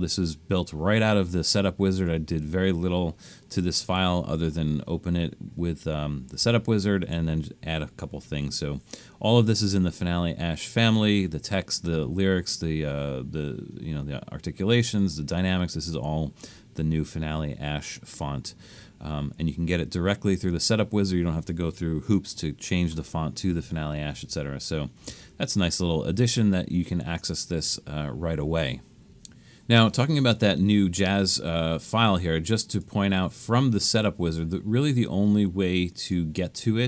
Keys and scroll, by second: 7.0 super+=, 23.7 super+-, 24.2 super+-, 25.0 super+-.